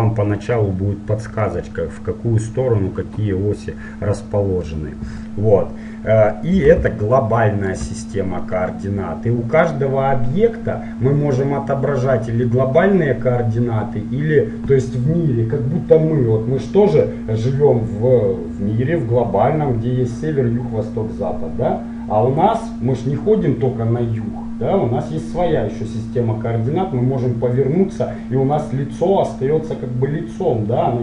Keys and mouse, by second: 1.6-31.0 middle drag.